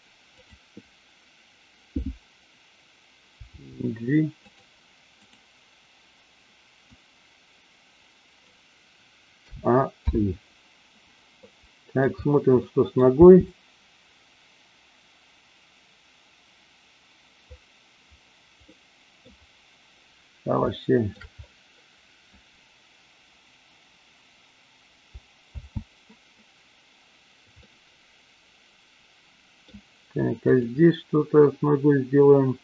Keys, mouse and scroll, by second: 0.3 click, 3.4 g, 4.4 click, 7.0-8.3 drag, 9.3 a, 10.1 i, 11.4-11.9 middle drag, 12.5-12.9 middle drag, 13.1 space, 18.6-19.2 middle drag, 20.6-21.2 shift+middle drag, 25.6 space, 27.6-29.7 middle drag.